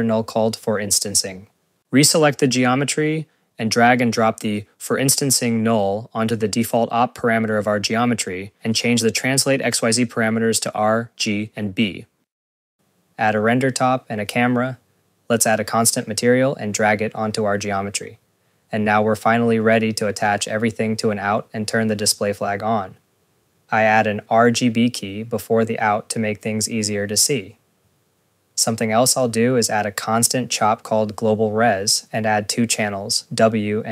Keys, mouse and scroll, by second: 0.1 click, 1.8-3.3 typing, 4.3 click, 12.5 scroll, 12.5 click, 12.7 click, 13.2 Tab, 13.5 n, 13.7 click, 14.1 Tab, 14.1 click, 14.3 click, 14.3 a, 15.1 Tab, 15.5 click, 15.6-16.8 typing, 16.8 click, 19.1 click, 19.9 scroll, 20.2 click, 20.5 scroll, 20.9 right click, 21.2-22.4 typing, 22.3 click, 22.9 scroll, 23.2 click, 23.6 click, 24.5 click, 25.0 scroll, 25.1 ctrl+s, 25.4 Tab, 26.3 click, 26.6 right click, 26.9 click, 27.0-27.9 typing, 27.9 click, 29.4 scroll, 29.6 ctrl+s, 29.7 click, 30.7 click, 30.9 scroll, 31.0 click, 31.4 click, 31.5-33.2 typing.